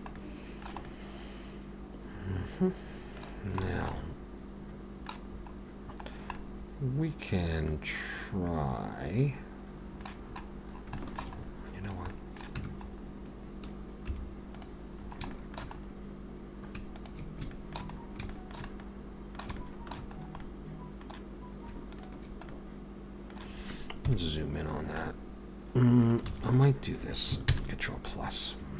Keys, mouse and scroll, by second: 0.2 middle click, 0.9 middle click, 3.3 scroll down 2, 3.6 shift+middle click, 3.9 middle click, 5.3 scroll up 3, 6.1-6.8 scroll down 2, 6.4 middle click, 10.3-10.9 scroll up 4, 11.0 shift+middle click, 11.4-12.1 scroll up 2, 11.9 click, 12.1 middle click, 12.6 Tab, 12.9-14.1 scroll up 1, 14.1-14.6 scroll up 1, 14.1 3, 14.6 click, 15.0-16.8 scroll up 3, 15.3 shift+middle click, 16.8 scroll up 1, 17.0 shift+click, 17.5 shift+middle click, 17.8-18.3 scroll up 3, 18.3 shift+middle click, 18.8 middle click, 19.6 shift+middle click, 20.2-21.7 scroll up 2, 20.4 middle click, 21.9 shift+click, 22.5 middle click, 24.1 KP_Decimal, 24.8 scroll down 2, 25.0 middle click, 26.3 alt+a, 26.5 click, 27.4 ctrl+KP_Add, 28.6 scroll down 1.